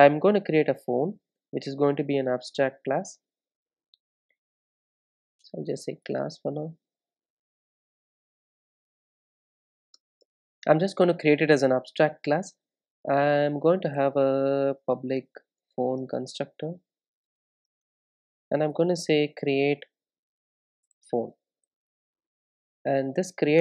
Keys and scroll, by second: 10.7 Return, 15.2 Return.